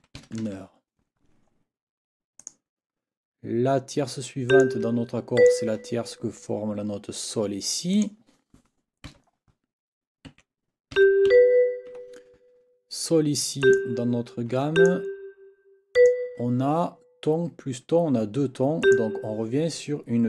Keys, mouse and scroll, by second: 0.0-0.9 typing, 2.4 click, 4.5 click, 5.4 ctrl+click, 7.9 click, 9.1 n, 10.3 6, 11.0 g, 11.3 b, 13.6 click, 14.7 shift+click, 15.9 shift+click, 18.8 click.